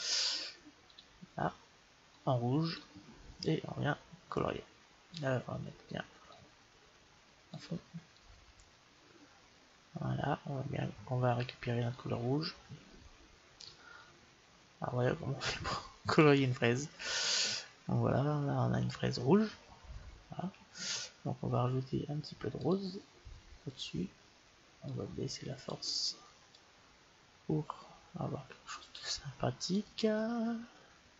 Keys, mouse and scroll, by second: 2.0-5.2 drag, 6.1-8.0 drag, 8.3-13.9 drag, 22.4-24.2 drag, 24.9-28.3 drag.